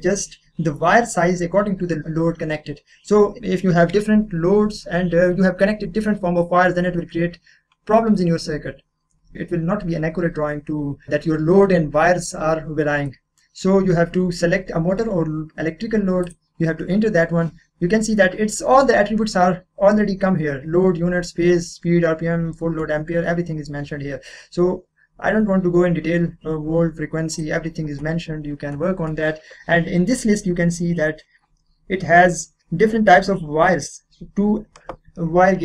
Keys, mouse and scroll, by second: 9.3 scroll up 1, 12.7-13.1 scroll down 1, 13.1-15.1 middle drag, 16.2 click, 17.7-19.1 scroll down 1, 27.3 click, 29.6 scroll down 1, 30.5-31.9 scroll up 1.